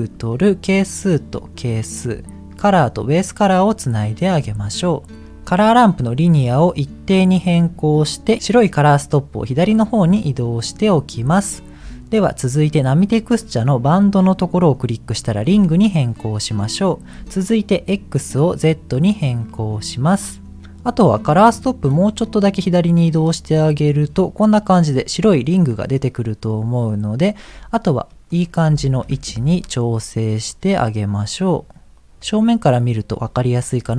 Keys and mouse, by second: 1.0-2.5 drag, 3.2 click, 6.0-7.2 drag, 8.9-11.1 drag, 13.8-15.3 drag, 16.1 middle click, 17.7-18.8 drag, 21.5-24.1 drag, 28.2 middle click, 29.0 KP_1, 30.5-32.7 drag.